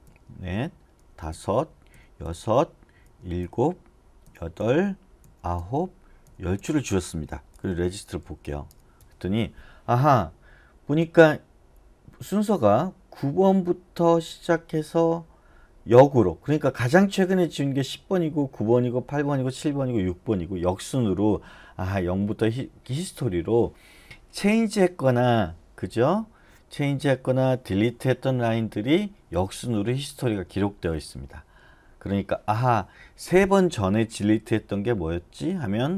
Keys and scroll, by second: 0.0 d, 1.0 d, 1.9 d, 3.0 d, 3.4 d, 4.6-8.7 typing.